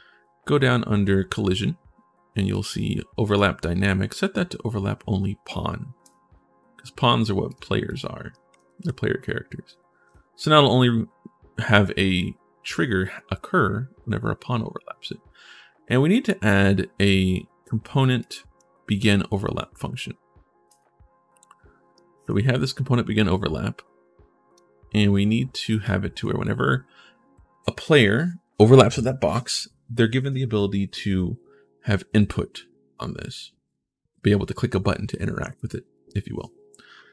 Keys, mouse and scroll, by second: 1.3 scroll down 1, 2.3 click, 3.0 click, 18.0 click, 21.7 right click, 22.4-24.3 drag, 22.4-24.3 right drag, 25.6 right click.